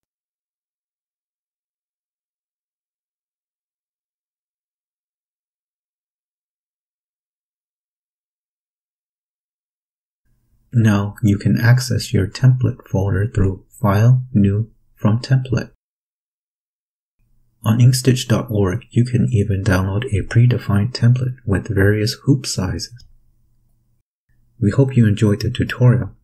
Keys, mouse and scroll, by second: 3.8 click, 4.6-7.8 typing, 9.6 click, 12.6 click, 15.0 click, 16.8-17.7 typing, 19.1 click.